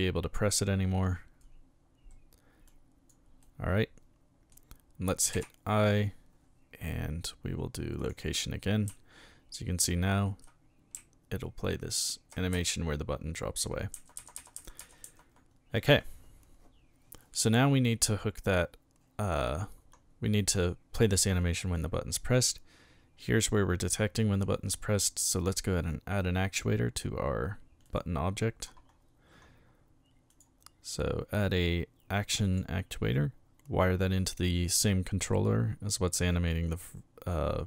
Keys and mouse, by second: 0.5 click, 2.7 click, 3.4-4.5 middle drag, 5.3 i, 8.0 click, 9.4 Left, 11.4 Right, 12.5 Left, 14.2 Left, 14.8 Left, 27.8 click, 30.3 click, 32.4 click, 33.8-34.8 drag.